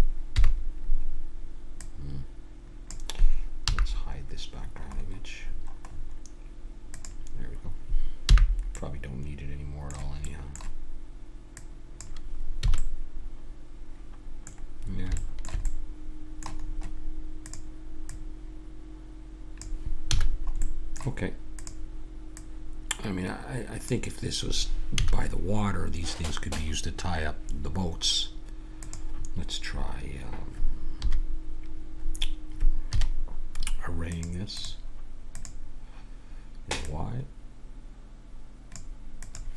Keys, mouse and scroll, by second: 0.3 KP_1, 1.8-3.5 drag, 3.6 n, 7.0-8.2 drag, 8.2 n, 8.8 middle click, 9.7 middle click, 11.5-13.0 drag, 12.6 a, 13.0 middle click, 14.1-17.4 middle drag, 17.4-19.9 drag, 20.1 a, 20.2-21.6 middle drag, 21.6-24.1 drag, 24.9 a, 28.8-30.6 drag, 30.9 KP_3, 32.9 KP_3, 34.1-36.3 drag, 36.8-38.6 drag, 39.2-39.5 drag.